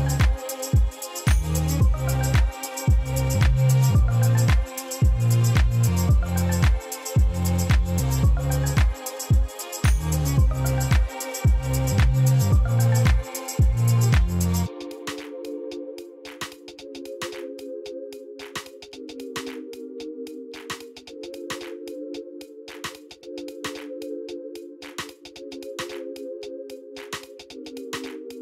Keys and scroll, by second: 1.6 Tab, 14.5 Tab, 20.6 i, 28.3 shift+z.